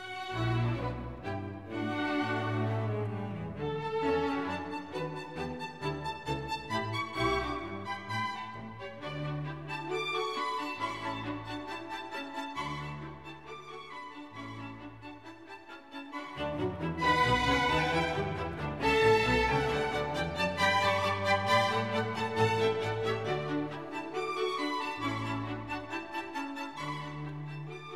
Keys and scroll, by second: 1.4 super+z, 10.8 alt+super+z.